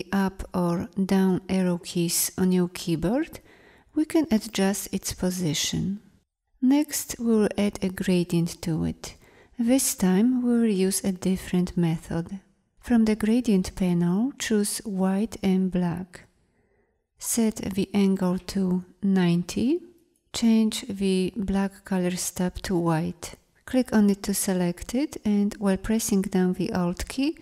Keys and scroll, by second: 0.0 Up, 1.0 Down, 4.6 Up.